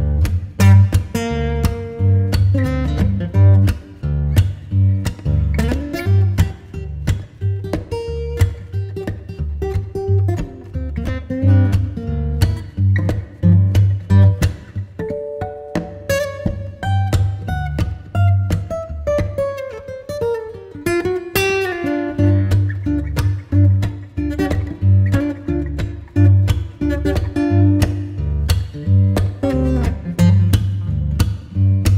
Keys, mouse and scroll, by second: 1.9-3.5 middle drag, 3.5 Tab, 3.9-5.7 right drag, 5.7 a, 6.3-8.4 right drag, 8.4-11.5 drag, 11.5 KP_0, 12.2 KP_3, 13.5 middle click, 14.1-15.2 scroll up 5, 15.4-18.6 drag, 18.6 ctrl+s, 29.2 ctrl+s.